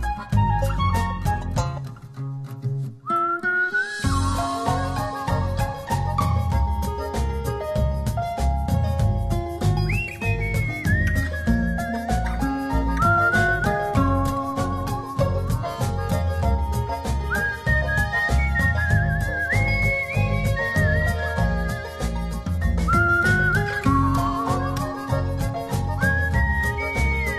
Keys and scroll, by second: 0.0 Return, 26.5 super+z.